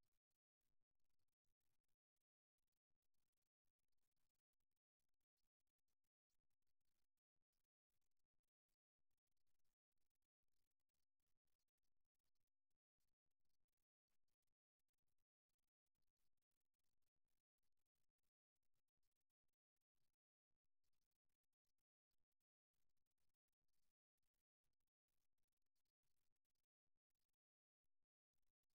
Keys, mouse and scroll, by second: 0.5-2.4 middle drag, 5.6 ctrl+z, 7.6-10.9 right drag, 12.6 middle click, 14.5-15.5 middle drag, 15.5-16.7 right drag, 16.7-18.2 middle drag, 18.2 KP_3, 20.2 g, 22.2-24.0 drag, 23.4 g, 27.3-28.7 middle drag.